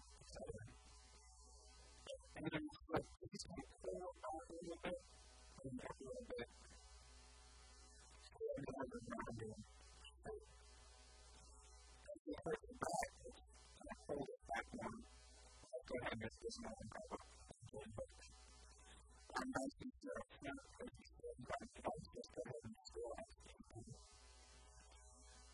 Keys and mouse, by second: 0.4 s, 1.4 a, 1.6 b, 2.5 b, 3.4-5.4 drag, 5.0-6.8 typing, 6.1-7.8 drag, 8.2 click, 8.3-12.8 typing, 9.5 click, 14.4-16.1 typing, 16.3-17.3 drag, 19.0-22.8 typing, 24.1 s, 24.8 a, 25.1 b.